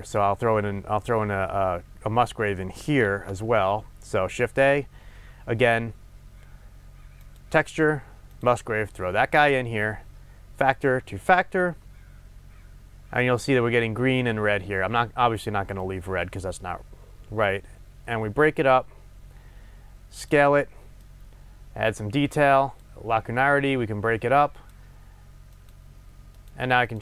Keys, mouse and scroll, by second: 3.0 shift+a, 10.6-26.6 drag, 26.9 click.